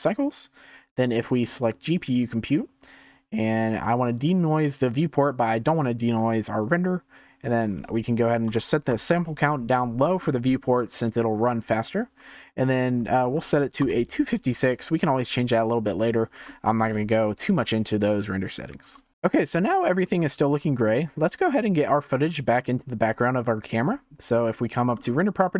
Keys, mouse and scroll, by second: 4.8 click, 6.5 click, 7.5-10.1 drag, 10.1-11.9 shift+middle drag, 11.9-16.4 drag, 16.4-18.8 shift+middle drag, 18.8 ctrl+s, 19.1-19.7 shift+middle drag, 19.7-20.1 scroll up 1, 20.1-23.2 shift+middle drag, 24.9 scroll down 7.